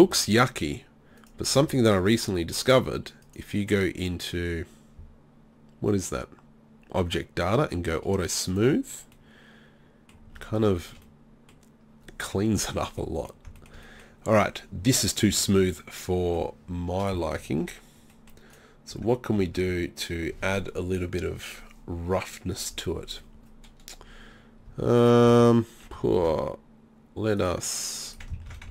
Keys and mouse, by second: 1.2-2.3 middle drag, 9.2-10.4 middle drag, 10.9-12.6 middle drag, 18.9 Tab, 19.4 Tab, 19.7 Tab, 24.7 Tab, 25.3 Tab, 26.1 ctrl+r, 28.5 ctrl+z.